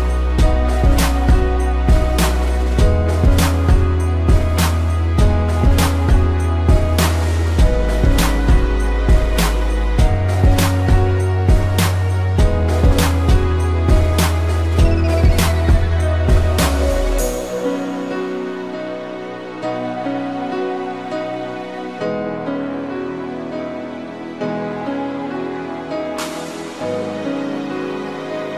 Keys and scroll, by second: 0.6 space, 6.4 ctrl+0, 8.3 z, 14.7 ctrl+0, 15.6 v, 22.8 z.